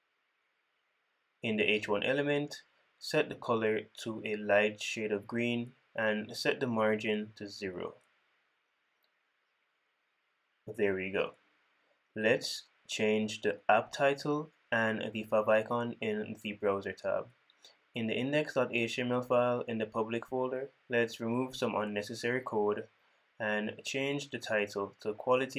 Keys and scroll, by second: 6.6 super+Right, 9.5 super+s, 10.3 super+s, 16.3 super+p.